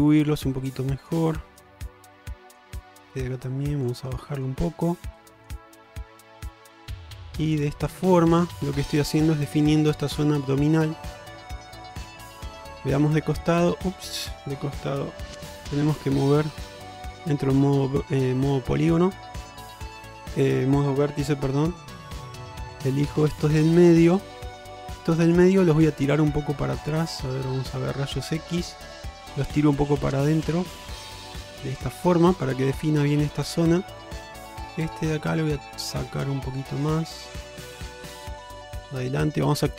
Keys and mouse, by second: 0.5 click, 1.4 click, 2.2 click, 2.9-3.9 drag, 4.3 shift+middle click, 5.2 click, 5.9 shift+middle click, 6.6 click, 7.2 click, 8.4 click, 9.5 shift+middle click, 11.5 click, 12.4-13.7 middle drag, 13.9 middle click, 15.7 1, 17.0 Tab, 17.6 middle click, 19.8 click, 21.3 1, 23.5 shift+click, 24.0 shift+click, 25.3 shift+click, 25.7 middle click, 27.1 alt+z, 28.9 click, 29.1-30.9 drag, 31.5 alt+z, 31.9-32.6 middle drag, 33.2-33.5 shift+middle drag, 33.7-34.3 middle drag, 34.8-36.0 middle drag, 36.4 alt+z, 37.0-38.3 drag, 38.7 alt+z, 38.8 middle click.